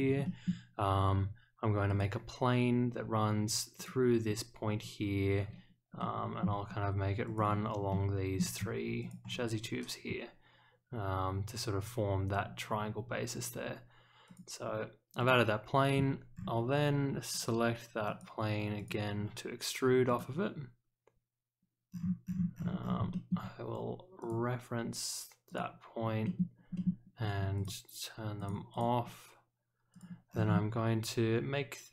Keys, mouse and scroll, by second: 0.2 shift+middle click, 1.8 click, 3.7 click, 6.0-6.4 middle drag, 7.2 ctrl+click, 7.9-8.3 middle drag, 9.0 ctrl+click, 14.2 click, 15.2 click, 17.3 click, 18.0 click, 18.7 click, 20.0 click, 21.9-22.7 scroll down 2, 23.1 shift+middle click, 24.2 click, 25.4 click, 26.2 middle click, 26.7 middle click, 27.5 click, 28.3 click, 28.7 click, 29.9 click, 30.3-30.7 scroll down 1.